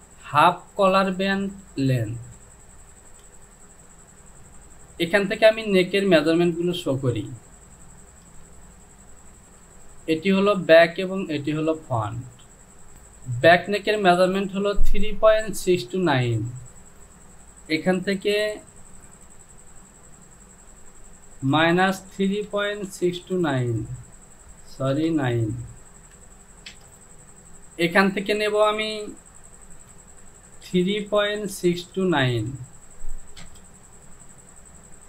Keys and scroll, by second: 8.6 space, 11.7 space, 19.2 Down, 21.6 KP_Subtract, 22.2-23.5 typing, 24.9 BackSpace, 26.1 KP_9, 26.7 Return, 26.9 ctrl+z, 29.9 Down, 30.7-32.4 typing, 33.4 Return.